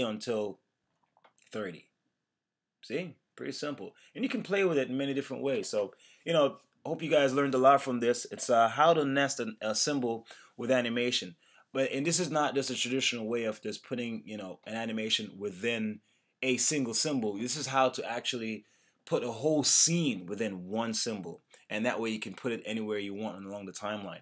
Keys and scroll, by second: 0.3 Return.